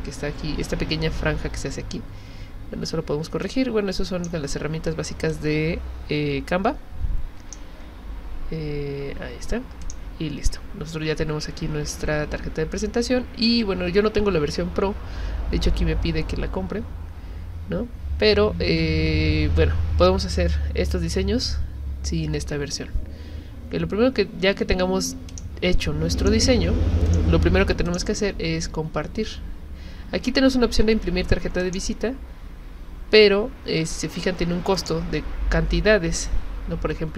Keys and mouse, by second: 3.4-4.3 drag, 5.3-7.6 drag, 9.8 click, 25.3 click, 26.2 click, 27.1 click, 27.9 click, 31.6 click, 34.7 click.